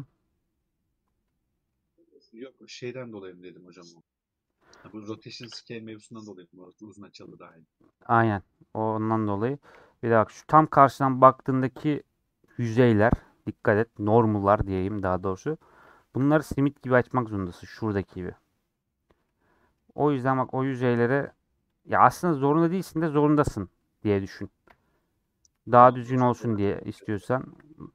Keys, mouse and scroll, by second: 1.9-2.6 scroll up 1, 2.6-3.1 scroll up 1, 3.1-4.6 middle drag, 4.6 3, 4.8 middle click, 5.3 Tab, 5.6-5.9 scroll down 3, 5.9-8.7 middle drag, 8.7 KP_7, 10.0-11.5 scroll up 1, 11.5-15.5 scroll up 1, 15.5-16.0 scroll up 1, 16.0 Tab, 19.2 middle click, 20.1-21.3 scroll up 2, 21.3 alt+click, 21.8 alt+click, 22.1-24.7 middle drag, 24.7 ;, 25.8 click, 26.4-26.8 scroll down 2, 26.8-27.9 middle drag.